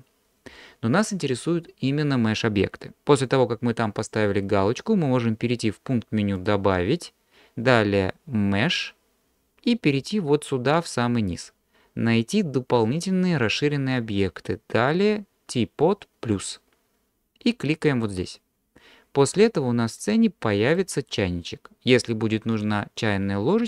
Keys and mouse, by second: 6.5-18.1 drag, 20.0-20.8 middle drag, 22.6 click.